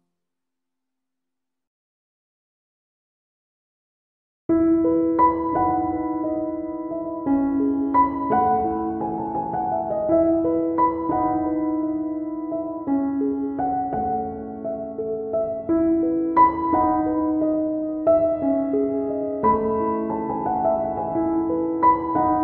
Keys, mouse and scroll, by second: 1.9 click, 2.1 click, 2.4 right click, 4.1 middle click, 5.0 middle click, 6.2 ctrl+right click, 6.5 right click, 7.3 click, 9.9 click, 10.9 click, 12.6 middle click, 13.4 right click, 14.0 ctrl+right click, 14.6 right click, 15.5 click, 19.2 ctrl+middle click, 20.3 middle click.